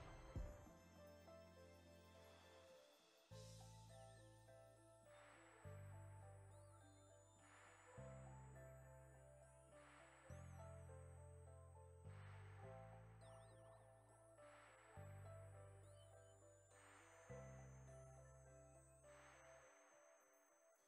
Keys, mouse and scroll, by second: 6.5 ctrl+z, 7.6 alt+shift+right click, 8.3 alt+shift+right click, 9.3 alt+shift+right click, 9.6 right click, 11.3 click, 17.0 right click, 17.7 alt+shift+right click, 19.4 click.